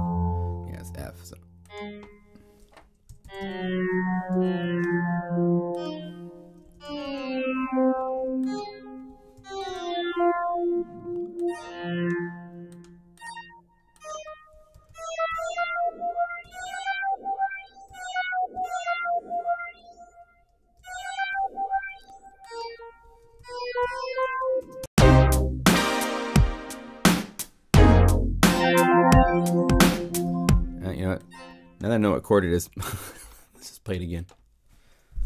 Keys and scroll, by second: 3.2 alt+Down, 6.7 alt+Down, 9.3 alt+Down, 14.8 alt+Up, 17.8 alt+Down, 20.7 alt+Up, 23.3 alt+Up, 24.6 alt+0, 24.8 Page_Up, 30.1 0, 32.5 BackSpace, 35.1 BackSpace.